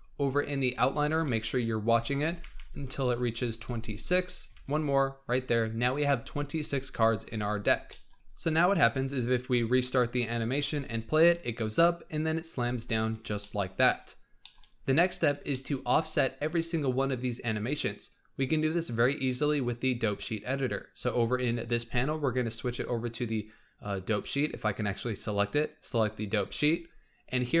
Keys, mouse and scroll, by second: 0.4 scroll down 1, 0.7-1.0 shift+r, 1.3-1.8 scroll down 9, 1.8-2.6 shift+r, 2.8-3.4 scroll down 9, 3.4-3.7 shift+r, 3.8-4.4 scroll down 5, 4.4 shift+r, 5.1-7.1 scroll down 4, 7.1-7.8 scroll down 8, 7.8 shift+middle click, 9.3-10.6 drag, 10.6 space, 12.5 space, 12.8-13.3 scroll up 3, 13.3 shift+middle click, 13.9-14.3 shift+scroll up 3, 14.3 shift+middle drag, 14.6-15.4 scroll up 4, 15.4-15.8 shift+middle drag, 15.8-18.8 scroll up 2, 19.1-27.6 drag.